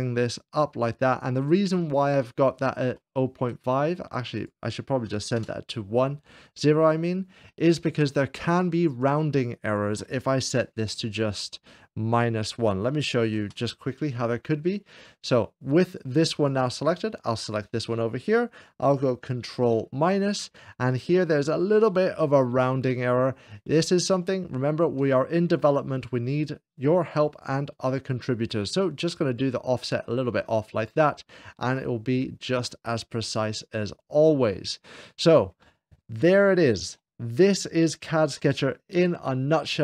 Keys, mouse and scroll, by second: 0.0 click, 1.8 click, 2.2-3.8 middle drag, 4.2-5.3 drag, 5.1 KP_0, 5.4 Return, 7.3-8.3 middle drag, 7.6 0, 9.4-10.4 drag, 10.5 1, 10.8 Return, 11.9-13.0 drag, 13.4 Return, 15.7-17.3 drag, 15.9 Return, 15.9 1, 17.4 shift+click, 20.0 ctrl+-, 21.0 scroll up 2, 21.1 middle click, 21.7 ctrl+-, 21.7-24.6 middle drag, 24.5 scroll down 2, 24.6 scroll down 1, 25.3 shift+middle click, 26.3-28.2 drag, 28.9-30.7 drag, 31.4-32.4 middle drag, 32.6 middle click, 33.0 middle click, 33.7 scroll down 2, 34.4-35.4 middle drag, 35.6-36.6 middle drag, 38.2-39.2 shift+middle drag.